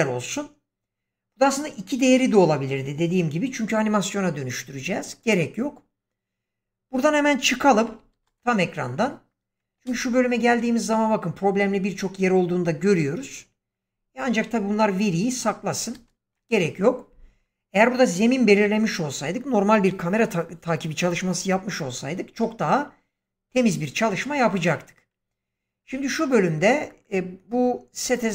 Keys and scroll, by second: 8.0 ctrl+space, 15.8 ctrl+space.